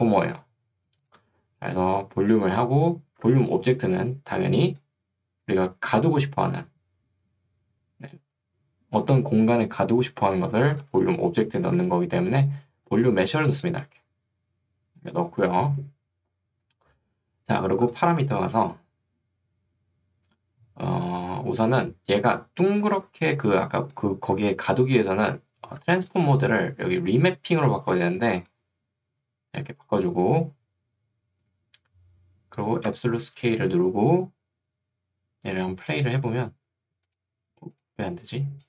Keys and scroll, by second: 3.5 ctrl+2, 5.3 Escape, 10.9 ctrl+2, 11.9 Escape, 23.1 ctrl+2, 24.5 Escape, 25.9 ctrl+2.